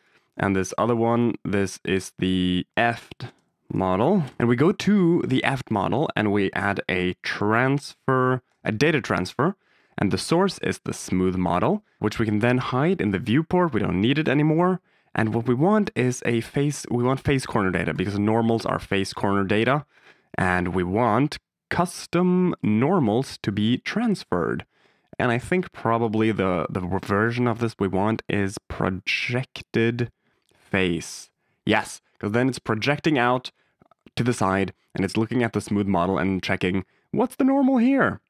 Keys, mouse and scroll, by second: 0.7 click, 1.1 click, 2.7 F2, 5.5 click, 10.2 click, 11.4 click, 13.0 click, 14.2 click, 16.9 click, 17.9 click, 19.4 click, 22.5-24.5 drag, 24.7 middle drag, 27.2-30.5 drag, 32.6-33.5 d, 32.7 click, 35.4 d, 35.9 d, 36.0 d, 36.1 d, 37.2 drag.